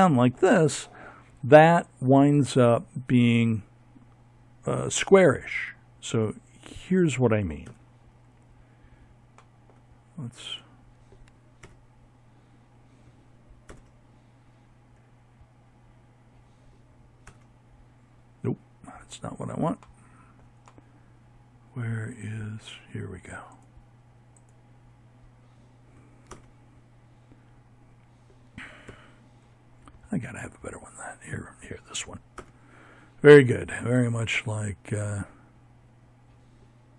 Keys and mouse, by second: 5.5 z, 9.4 ctrl+KP_0, 11.5 ctrl+Right, 15.2 ctrl+KP_0, 22.2-24.1 right drag, 24.1 ctrl+KP_0, 26.7 KP_7, 29.0-30.0 right drag, 30.2 ctrl+KP_0, 30.8 middle click, 35.0 KP_1.